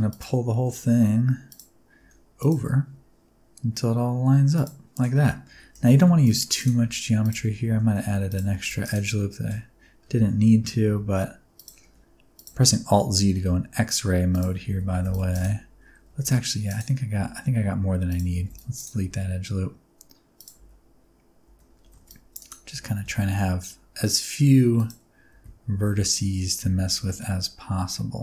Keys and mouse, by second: 0.0 click, 0.4 e, 1.4 click, 1.9 r, 2.3 click, 3.4 g, 4.5 click, 5.1 alt+z, 5.4 1, 5.7 alt+a, 5.9 c, 6.5 click, 6.7 r, 7.1 click, 8.2 click, 8.2 g, 8.4 alt+a, 8.5 c, 8.7 click, 9.4 g, 9.4 h, 10.1 ctrl+z, 10.8 g, 11.5 click, 11.7 r, 12.3 click, 12.4 alt+z, 13.1 g, 14.2 shift+click, 14.6 alt+z, 14.8 alt+a, 15.2 click, 15.2 c, 16.0 alt+a, 16.2 c, 16.6 click, 17.1 x, 18.3 alt+a, 18.4 c, 18.7 click, 19.0 g, 20.3 click, 20.5 alt+z, 21.4 alt+z, 21.7 alt+a, 22.0 c, 22.3 click, 22.6 alt+z, 22.9 g, 24.7 click, 25.2 alt+z, 25.6 alt+z, 26.0 shift+click, 26.5 Tab, 27.0-28.2 middle drag.